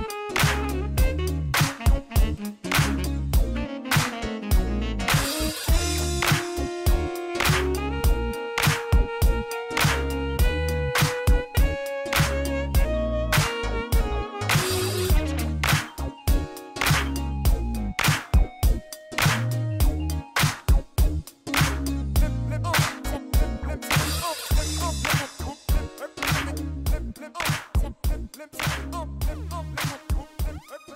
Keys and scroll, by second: 0.8 shift+d, 0.9 shift+z, 2.7 shift+d, 2.8 shift+z, 3.8 r, 5.2 shift+d, 6.3 shift+z, 7.5 g, 7.7 shift+z, 8.4 alt+a, 9.6 r, 11.1 alt+a, 23.4 alt+a.